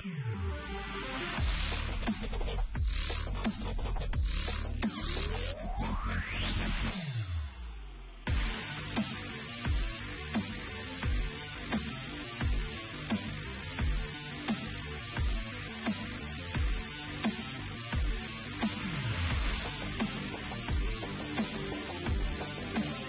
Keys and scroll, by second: 0.0-1.5 typing, 6.0 ctrl+t, 7.4 Return, 13.6 Return, 13.9 Return, 15.2 ctrl+t, 16.1 Escape, 17.0 ctrl+t, 18.9 Return, 19.9-22.9 typing.